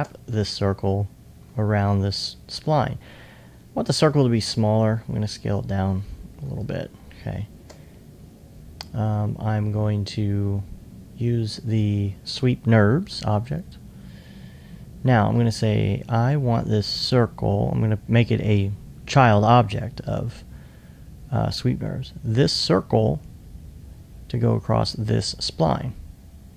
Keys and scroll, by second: 0.3 alt+2, 0.7 alt+2, 4.5 r, 6.7 alt+t.